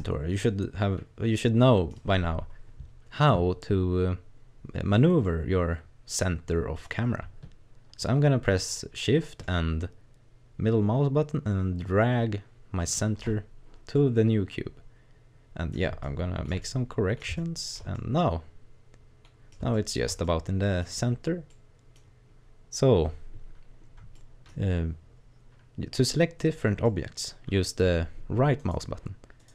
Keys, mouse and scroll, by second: 5.2 middle click, 9.4 shift+middle click, 13.9 middle click, 16.0 shift+middle click, 16.6 middle click, 17.4 shift+middle click, 17.9 middle click, 19.7 shift+middle click, 20.3 middle click, 20.8-21.2 scroll up 3, 21.5 middle click, 22.0-23.3 scroll down 3, 23.6 scroll down 2, 24.0 scroll up 1, 24.1 middle click, 26.8 middle click, 28.6 right click, 29.4 right click.